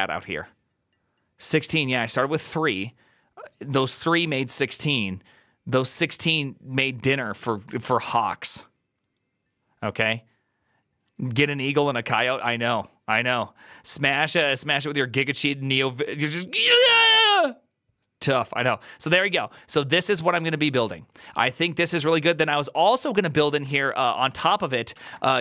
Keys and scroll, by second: 25.3-25.4 typing.